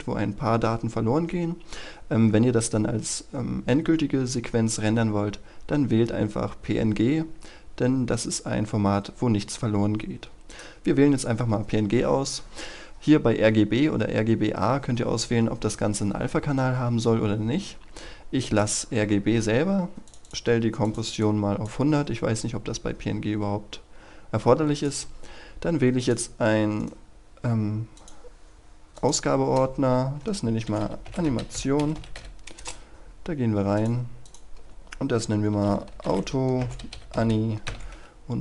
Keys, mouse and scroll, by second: 22.2-24.6 scroll down 1, 24.6 click, 26.7 right click, 27.8 click, 30.3-32.5 typing, 33.6-35.2 drag, 35.2-37.5 typing.